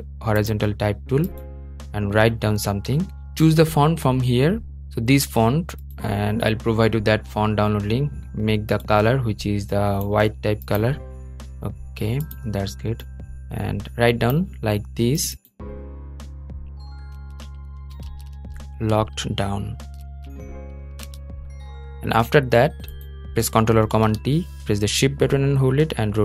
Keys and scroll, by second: 23.6 super+t.